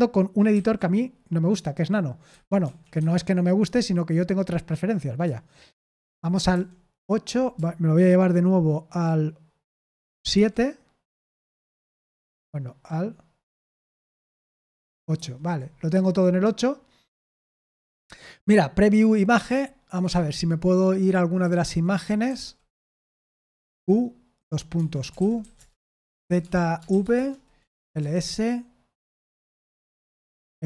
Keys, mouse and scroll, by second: 0.5 ctrl+x, 2.2 Escape, 2.6 Escape, 2.9 Escape, 5.9 super+8, 6.5 super+8, 10.3 super+/, 11.5 super+/, 13.9 super+/, 19.5 click, 20.0 Escape, 22.2 k, 22.9 Escape, 23.2 Escape, 23.6 q, 24.7 Escape, 24.9-28.2 typing.